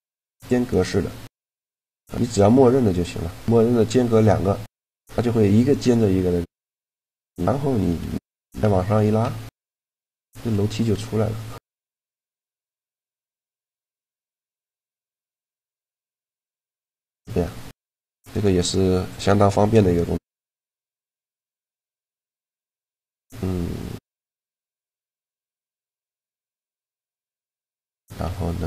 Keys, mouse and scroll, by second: 0.0-1.2 drag, 1.2-4.1 middle drag, 6.0-7.7 middle drag, 7.7 KP_1, 8.6 g, 12.0 middle click, 12.6-14.4 drag, 14.4 Tab, 15.0 r, 15.6 z, 16.5 z, 20.1-23.6 drag, 23.6-27.6 middle drag, 27.6 click, 27.8 Tab.